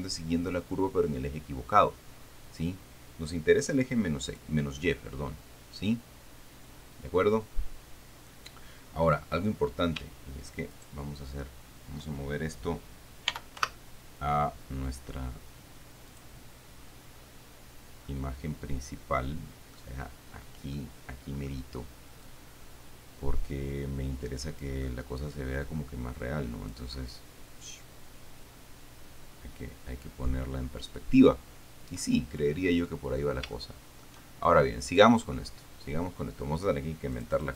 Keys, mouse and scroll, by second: 4.5 click, 5.5-6.2 scroll down 2, 11.0 shift+right click, 13.5 m, 13.8 1, 16.4 click, 17.4-18.1 scroll down 1, 18.1 scroll down 1, 18.3-20.2 middle drag, 20.2-20.8 scroll up 1, 20.8 scroll up 1, 21.0 middle click, 22.7-25.1 drag, 25.8-27.2 drag, 27.3-32.5 middle drag, 32.5-33.6 scroll up 1, 33.6 scroll down 1, 33.8 shift+middle click, 35.1 right click, 37.4 click.